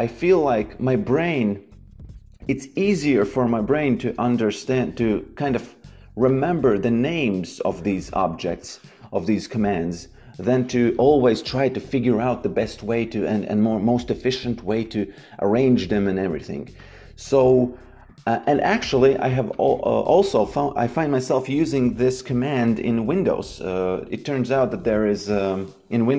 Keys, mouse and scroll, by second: 2.8 shift+c, 3.9 d, 5.6 KP_Enter, 6.2 click, 10.4 click, 14.7 click, 19.4 click.